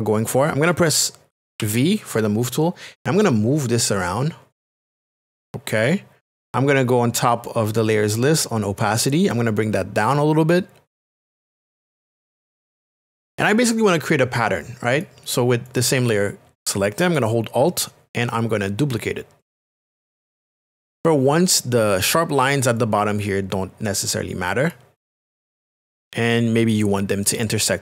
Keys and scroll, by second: 1.6 v.